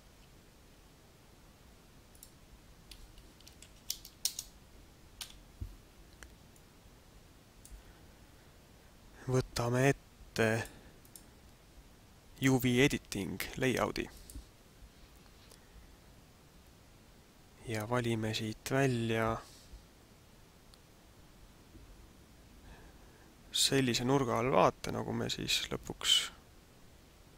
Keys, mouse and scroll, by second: 0.1 shift+a, 3.4 r, 5.1 KP_Decimal, 6.5 middle click, 10.6 click, 11.0 click.